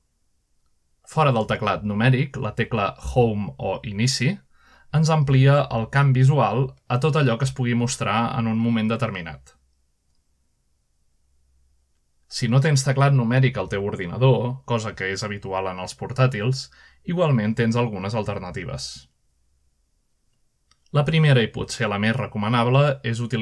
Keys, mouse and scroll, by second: 0.0-1.4 typing, 3.2 scroll down 1, 3.6-5.0 shift+middle drag, 5.2-5.8 shift+middle drag, 6.5 Home, 7.6-8.3 scroll up 2, 8.3-9.4 shift+middle drag, 9.4 Home, 13.6-14.1 shift+middle drag, 15.0 middle click, 15.6 KP_7, 16.5-17.1 scroll up 1, 18.1 middle click, 18.5 shift+middle drag, 19.7-20.0 shift+middle drag, 20.3-21.0 shift+scroll down 2, 20.4 shift+middle click, 21.0-21.9 middle drag.